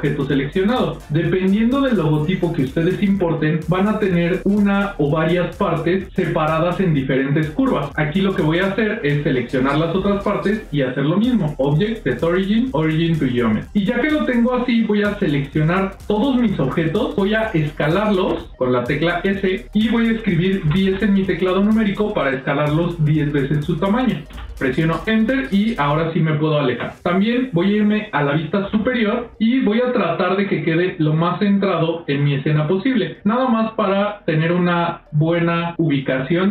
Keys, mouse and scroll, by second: 9.0 click, 11.2-15.7 drag, 18.2 s, 24.9 ctrl+scroll down 2, 25.2 ctrl+scroll up 1, 25.2 ctrl+middle click, 26.3 ctrl+middle click, 28.5 KP_7, 29.2 shift+middle click, 29.9 ctrl+middle click, 32.3 g.